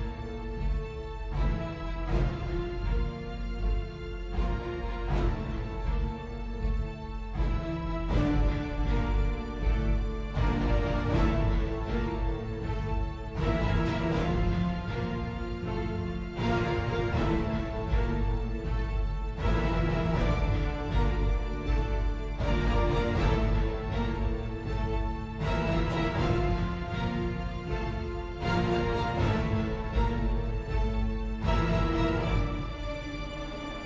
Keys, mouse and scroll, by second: 3.8 Delete, 7.1 typing, 12.1 i.